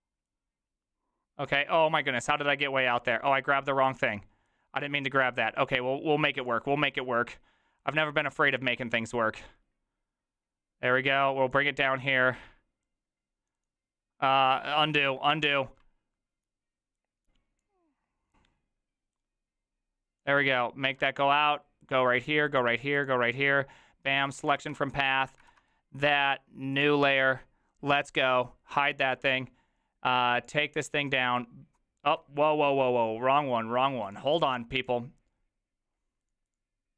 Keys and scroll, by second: 15.1 ctrl+z, 15.5 ctrl+z, 24.6 ctrl+x, 25.4 ctrl+v.